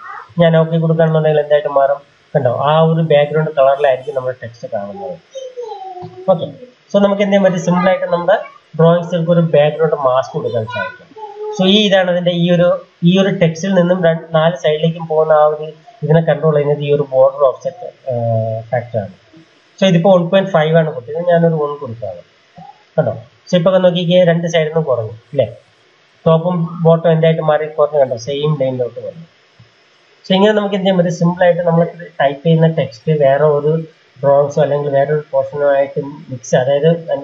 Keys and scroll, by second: 8.3 ctrl+a, 21.2 1, 21.8 Return.